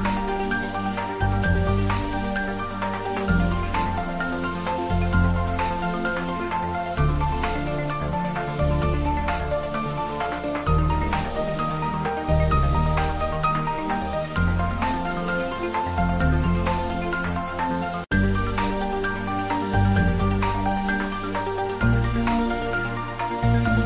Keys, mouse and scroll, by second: 0.0-0.5 scroll down 1, 2.8 click, 3.8 shift+z, 4.1 ctrl+middle click, 4.4 Tab, 4.5-5.7 middle drag, 5.9 Tab, 6.1 middle click, 7.3 g, 8.0 click, 8.3 shift+middle click, 8.4 shift+z, 9.2 Tab, 9.7 ctrl+middle click, 10.1 Tab, 10.6 Tab, 11.1 click, 11.7 shift+z, 11.9 middle click, 13.0 ctrl+3, 13.3 Tab, 14.0 ctrl+r, 14.2 click, 15.6 ctrl+e, 16.0 click, 16.8 ctrl+z, 17.0 middle click, 17.5 ctrl+z, 18.9 click, 19.9 ctrl+z, 21.5 click.